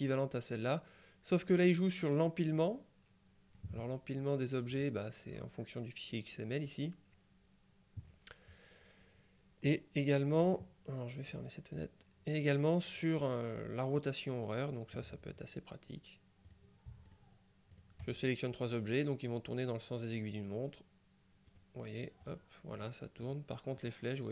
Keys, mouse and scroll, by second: 4.8 click, 11.4 click, 16.5-17.7 drag, 17.8 click, 21.6 click, 22.3 click, 23.3 click.